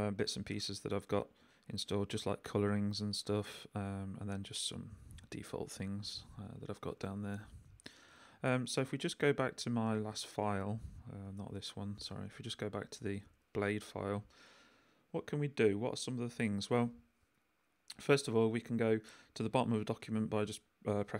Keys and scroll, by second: 2.8 j, 3.5 k, 5.0 j, 5.3 k, 9.3 super+k, 9.4 super+p, 9.8 super+Return, 10.6 Return, 11.2 super+p, 12.4 super+Down, 13.1 Return, 15.1 k, 18.7 shift+g.